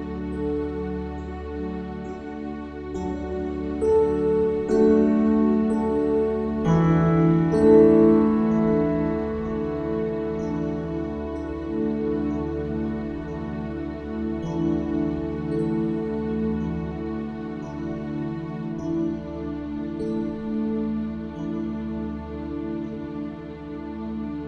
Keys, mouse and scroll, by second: 4.2 Tab, 6.2-8.7 drag, 7.2 Tab, 9.6 ctrl+r, 14.1 Tab, 18.9-20.8 ctrl+alt+shift+drag, 24.3-24.4 middle drag.